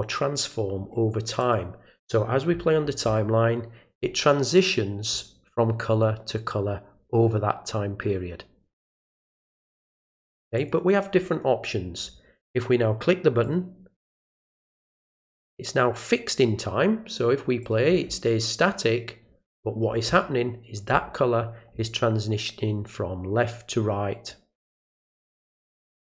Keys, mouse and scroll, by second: 1.4 click, 10.6 click, 13.4 click, 17.6 click, 25.0 click.